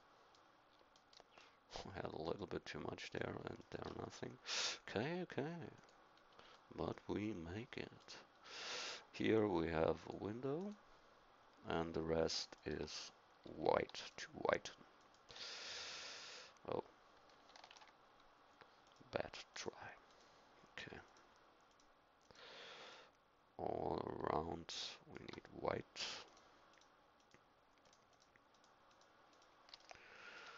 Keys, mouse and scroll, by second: 2.2-6.2 drag, 6.2-7.8 middle drag, 8.3-10.0 middle drag, 17.7 ctrl+z, 29.8 middle click.